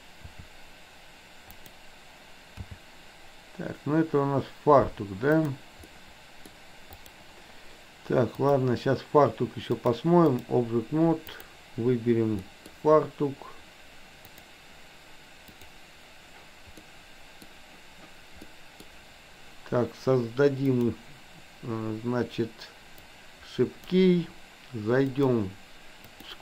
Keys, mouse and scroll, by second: 0.3 r, 2.8 g, 6.0-6.5 middle drag, 6.9 click, 8.4 click, 9.9-10.5 drag, 11.3 click, 12.4-12.8 middle drag, 15.5 click, 16.9-17.4 middle drag, 18.5 middle click, 20.8 click, 23.0 click, 25.0-26.4 drag.